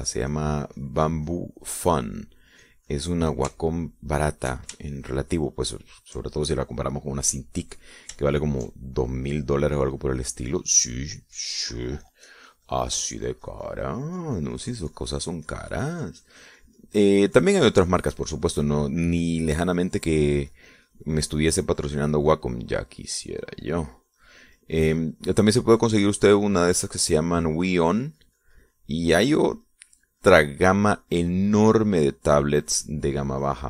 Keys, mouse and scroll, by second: 0.4 click, 0.7 click, 1.6-3.3 drag, 3.8 click, 4.3 click, 5.3 shift+middle click, 5.9 shift+middle click, 6.6 shift+click, 7.2 shift+middle click, 9.9 shift+click, 11.2 click, 12.5-33.6 drag.